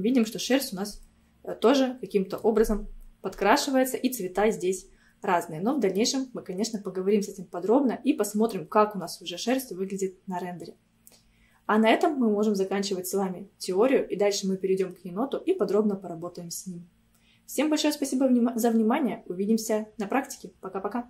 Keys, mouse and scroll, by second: 3.1-3.7 scroll up 1, 3.7-6.8 middle drag.